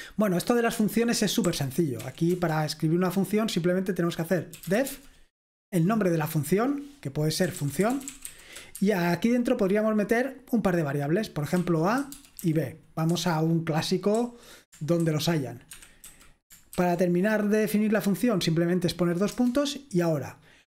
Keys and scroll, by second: 0.0-0.9 k, 2.0 o, 2.3 Return, 3.9-5.4 typing, 7.3-8.9 typing, 11.4-12.4 typing, 13.1 Escape, 13.9-17.3 typing, 19.4 Return.